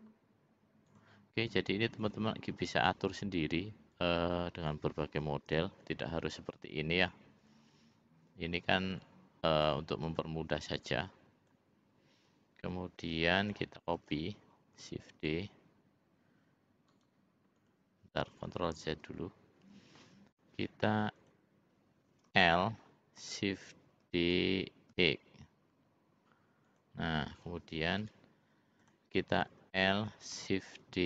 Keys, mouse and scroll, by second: 0.8 click, 2.0 click, 4.0 click, 5.8 ctrl+r, 9.0 click, 10.1 click, 10.8 click, 14.0 l, 15.1 shift+d, 18.4 ctrl+z, 18.6 ctrl+z, 18.8 ctrl+z, 20.2 click, 22.2 l, 24.0 shift+d, 28.9 click, 29.5 l, 30.7 shift+d.